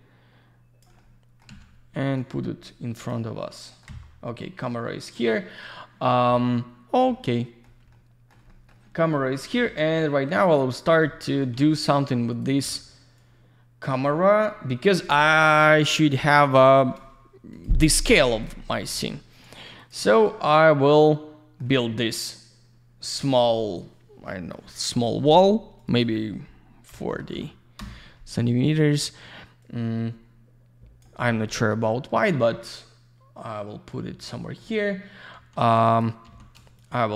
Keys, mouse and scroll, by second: 1.0 alt+middle click, 2.1 click, 3.6 middle click, 7.9 alt+middle click, 8.4 middle click, 10.7 middle click, 11.3 alt+middle click, 12.3 click, 13.2 click, 16.1 click, 17.5 click, 18.4 click, 19.8 click, 20.1 alt+middle click, 25.8 click, 25.9 click, 26.0 double click, 26.9 4, 27.8 Return, 29.6 click, 34.3 middle click, 35.3 w, 35.9 click, 36.8 shift+click.